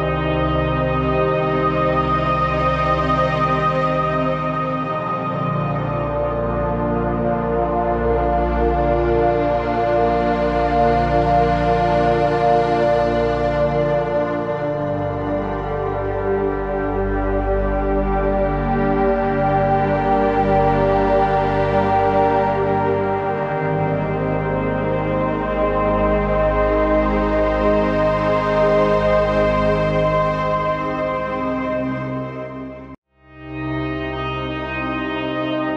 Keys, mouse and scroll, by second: 0.0 right click, 1.0 click, 2.4 z, 2.6 click, 2.7 space, 2.8 click, 3.0 z, 3.1 click, 5.8-7.0 alt+drag, 7.0 z, 7.1 click, 7.5 z, 8.0 click, 9.1 shift+Up, 10.6-12.3 typing, 11.6 click, 11.9 click, 12.4 click, 14.2-16.7 alt+drag, 17.0-19.2 drag, 20.9 ctrl+g, 22.6 shift+click, 28.9 alt+shift+z, 29.0 alt+shift+space, 29.2 click, 29.5 click, 29.7 space, 29.8-34.3 drag, 34.3-35.7 shift+drag.